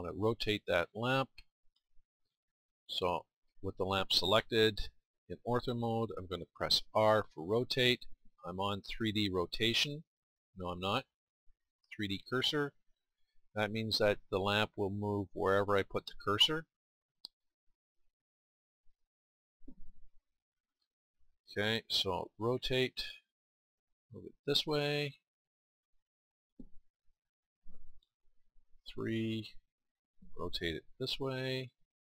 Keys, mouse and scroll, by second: 6.8 r, 16.8 middle click, 30.9 r.